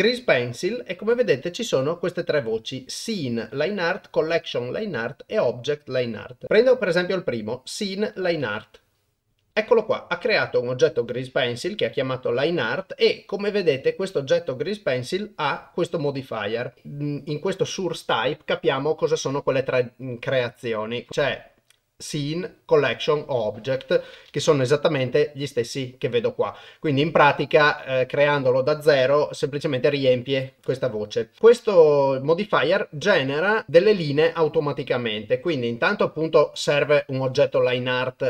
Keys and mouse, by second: 13.3 click, 19.2-23.7 drag, 24.3 shift+a, 33.0 click.